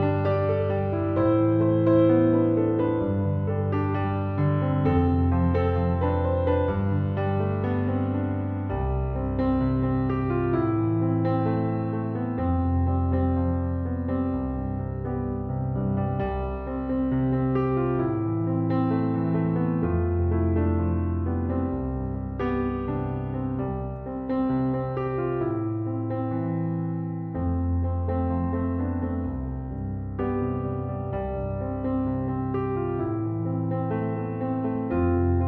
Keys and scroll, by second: 4.2 BackSpace, 6.8 BackSpace, 23.9 typing.